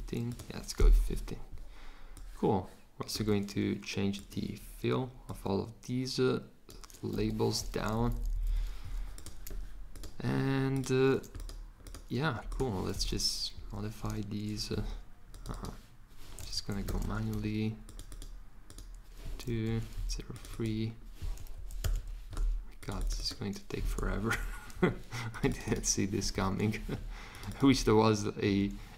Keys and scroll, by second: 7.1 Escape, 7.7 Down, 7.9 Down, 13.0 Return, 13.5 Right, 16.5 Down, 16.8 BackSpace, 17.0 2, 19.5 BackSpace, 19.6 3, 21.5 Down, 21.7 BackSpace, 24.2 5, 26.2 6, 28.4 7.